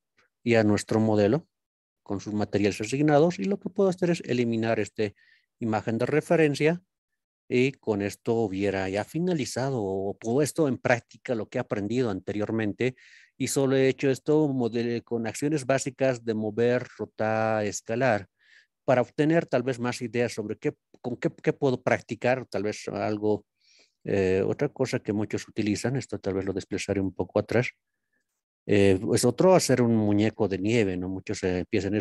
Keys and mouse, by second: 8.0-8.5 shift+middle drag, 9.0-9.7 middle drag, 11.3 middle click, 13.6-14.1 middle drag, 15.9-17.9 middle drag, 19.5-20.1 middle drag, 21.2 middle click, 24.4-25.2 drag, 28.1 click, 28.5 click.